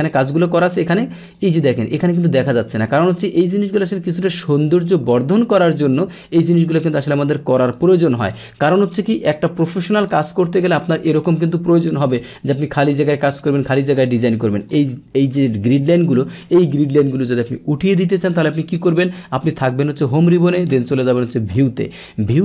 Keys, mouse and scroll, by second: 0.0 click, 1.2 click, 4.1 click, 5.0-6.2 middle drag, 6.2 click, 7.0 click, 7.6 click, 9.6 click, 10.9-12.1 scroll down 1, 12.1 click, 13.5 click, 14.6 click, 18.7 click, 21.5 click.